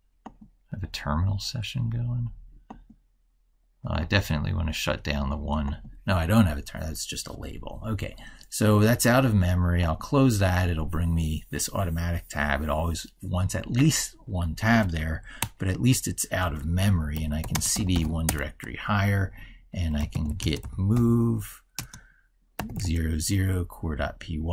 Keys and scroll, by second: 15.2 ctrl+super+Right.